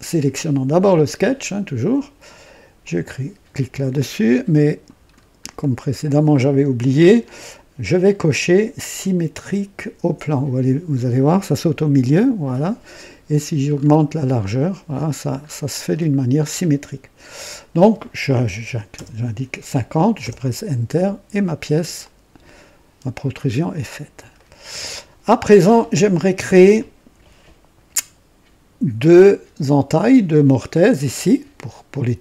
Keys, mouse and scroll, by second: 2.7 click, 3.9-4.9 drag, 5.1 scroll up 1, 5.5-6.2 right drag, 11.7 click, 13.6-14.0 scroll up 1, 14.3 scroll up 1, 14.9-15.7 scroll up 2, 15.9-16.6 scroll up 2, 18.6 KP_5, 18.8 KP_5, 18.9 KP_0, 20.1 KP_Enter, 21.3-21.8 scroll down 1, 22.0-23.5 drag, 23.6-23.9 scroll down 1, 24.3-24.8 right drag.